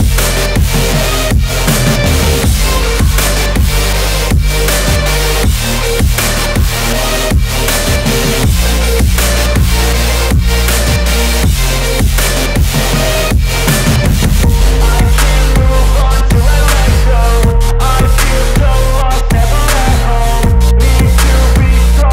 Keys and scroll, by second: 11.2 F4.